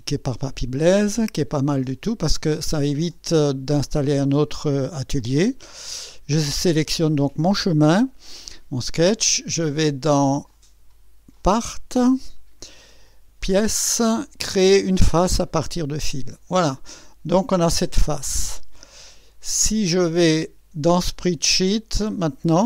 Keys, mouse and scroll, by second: 1.9 click, 5.6 click, 10.5 click, 11.4 click, 13.4 click, 15.8 click.